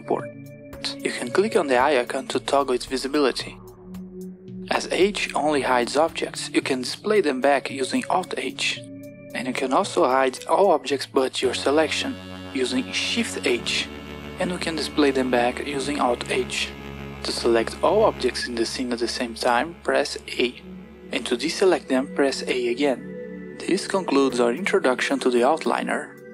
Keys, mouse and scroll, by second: 2.2 click, 5.0 h, 7.3 alt+h, 12.3 shift+h, 16.1 alt+h, 18.1 click, 19.0 a, 22.1 a.